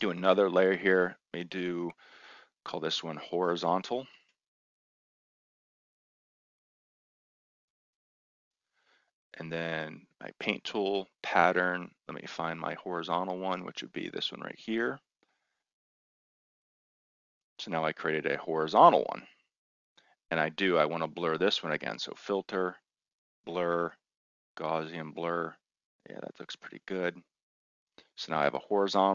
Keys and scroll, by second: 3.2-8.0 typing.